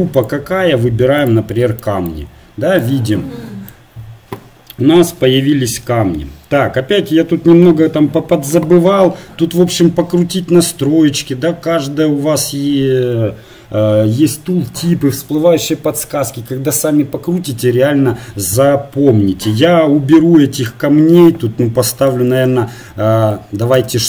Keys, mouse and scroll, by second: 1.8-3.5 middle drag.